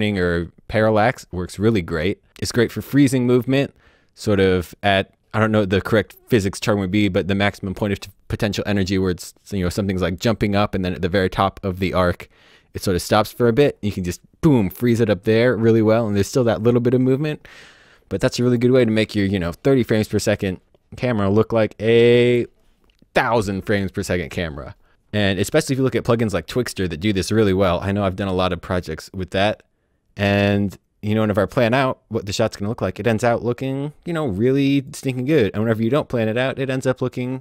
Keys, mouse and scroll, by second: 34.7 click.